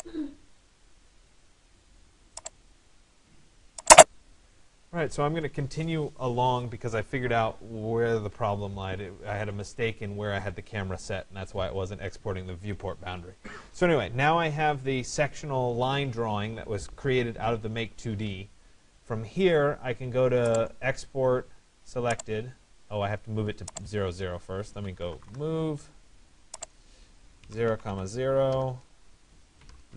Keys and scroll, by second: 24.7 Return.